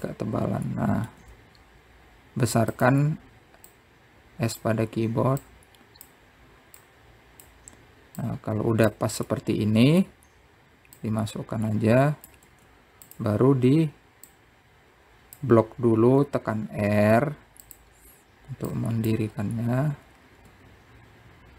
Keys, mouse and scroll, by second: 2.3 s, 4.9 click, 6.6 click, 8.0 click, 9.5 click, 10.5-12.2 middle drag, 12.2 click, 15.5 click, 17.4 r, 19.9 click, 20.6 scroll up 2.